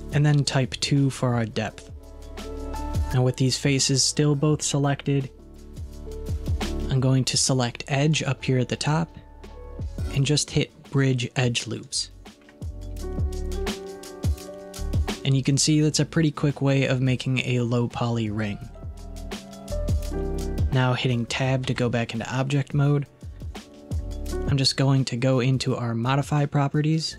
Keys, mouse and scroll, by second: 4.9-7.8 middle drag, 8.2-11.3 drag, 13.4 scroll up 1, 13.7-15.0 middle drag, 17.4-20.5 middle drag, 21.7 Tab.